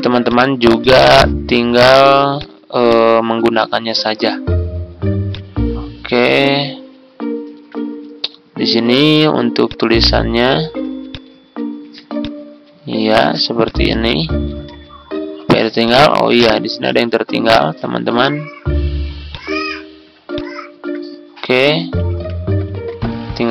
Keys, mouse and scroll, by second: 8.0-10.4 drag, 10.5 ctrl+z, 11.1 click, 13.5 click, 14.6 Tab, 15.7-17.8 drag, 19.2 ctrl+click, 20.3 shift+click, 21.9 ctrl+c, 22.7 Tab.